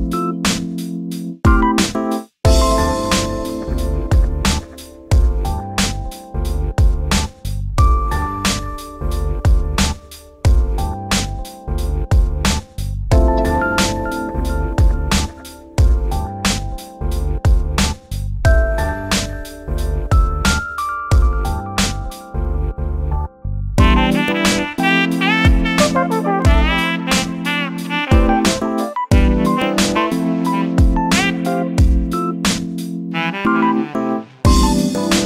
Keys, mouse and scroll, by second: 0.2 3, 0.3 click, 0.8 shift+d, 5.2 1, 5.6 click, 10.1 3, 10.3 click, 10.5-12.0 shift+middle drag, 12.3 shift+click, 12.9 shift+click, 13.3 shift+click, 13.9 shift+click, 14.2 shift+click, 14.5 shift+click, 14.8 shift+click, 16.7 shift+d, 21.8 shift+middle click, 22.5 click, 23.1 shift+d, 25.4 1, 25.9 click, 26.6 g, 28.5 scroll down 2, 28.7-30.2 shift+middle drag, 30.2 3, 30.3 click, 31.0 shift+d, 35.0 g.